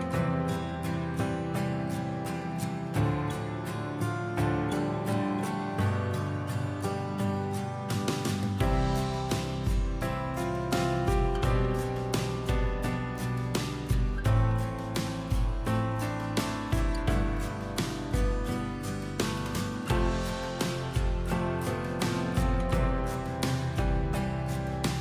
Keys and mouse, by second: 1.5-2.4 drag, 3.4 click, 4.2 r, 7.6 r, 10.9 click, 12.4 click, 12.4 0, 15.6 click, 16.0 0, 16.8 click, 18.6 click, 18.9 click, 19.2 click, 19.5 click.